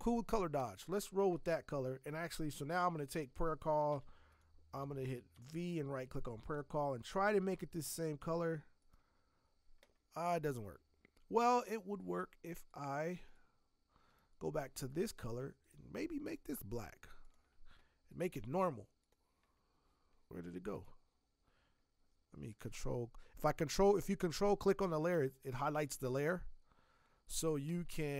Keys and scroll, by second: 3.9 v, 4.8 Escape, 4.9 Escape, 5.3 v, 25.1 alt+BackSpace, 25.7 ctrl+BackSpace.